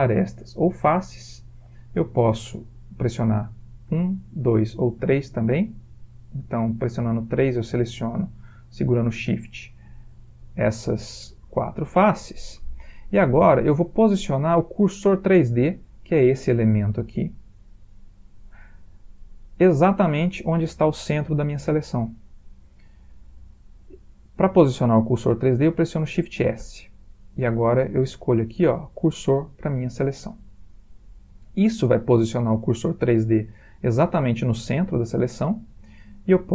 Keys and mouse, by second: 0.0 click, 0.8 click, 4.1 1, 4.5 2, 5.1 3, 7.4 click, 8.5 shift+click, 9.5 click, 10.4 shift+click, 11.7 middle click, 12.3 middle click, 13.5 middle click, 13.8-15.6 middle click, 15.0 middle click, 19.3-19.8 middle click, 19.7 middle click, 22.3 middle click, 26.7 shift+s, 30.5-33.7 middle click, 33.3 middle click, 33.4 middle click, 34.1 middle click, 34.3 middle click.